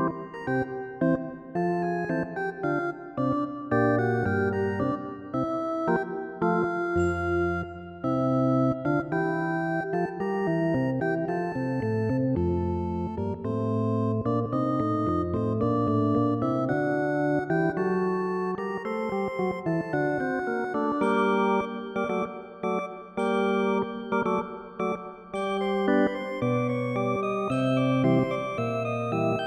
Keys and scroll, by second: 13.8 ctrl+0, 14.1 ctrl+-, 15.3 ctrl+=.